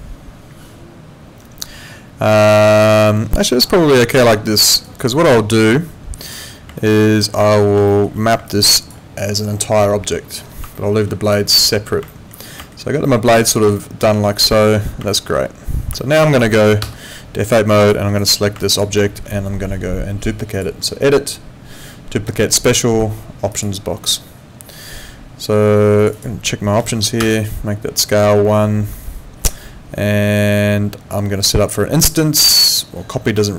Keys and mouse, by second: 4.8 alt+right click, 5.1 alt+click, 6.8 alt+middle click, 7.9 alt+middle click, 8.4 alt+click, 10.7 alt+middle click, 11.3 click, 12.1 alt+middle click, 13.8 alt+middle click, 14.5 alt+middle click, 15.1 alt+middle click, 16.0 alt+middle click, 16.3 alt+right click, 16.8 F8, 18.6 alt+click, 19.0 alt+middle click, 20.5 click, 23.5 click, 26.0 click, 26.8 1, 27.2 Return.